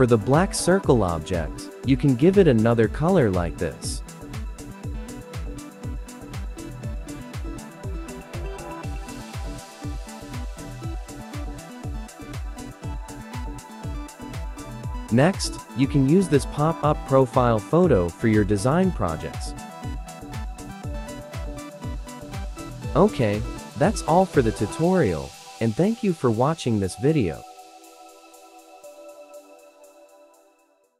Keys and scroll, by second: 0.2 ctrl+shift+w, 16.7 ctrl+g, 17.1 ctrl+g, 18.6 ctrl+shift+a, 21.1 ctrl+g.